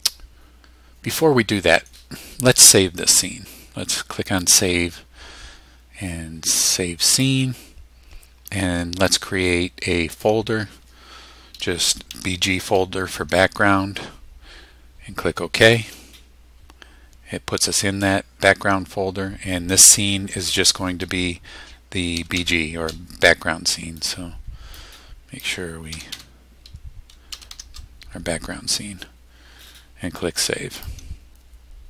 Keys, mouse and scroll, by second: 4.3 click, 7.1 click, 10.1 click, 11.6-12.6 typing, 15.6 click, 21.9-22.8 typing, 24.0 click, 24.7 click, 25.9 Delete, 27.1-28.0 typing, 30.8 click.